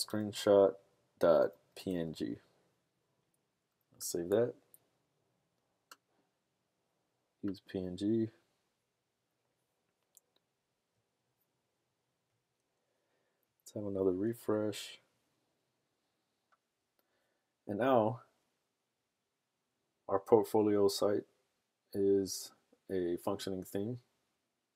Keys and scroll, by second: 0.0-2.4 typing, 3.5 typing.